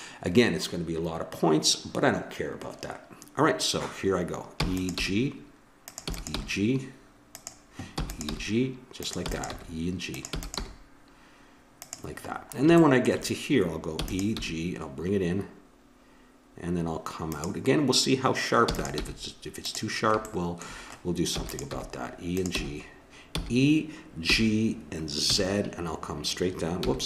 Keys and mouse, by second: 4.6 e, 4.9 g, 6.1 e, 6.4 g, 7.9-10.6 typing, 14.1 e, 14.4 g, 18.8 e, 19.0 g, 20.3 click, 21.3 e, 21.7 g, 22.6 g.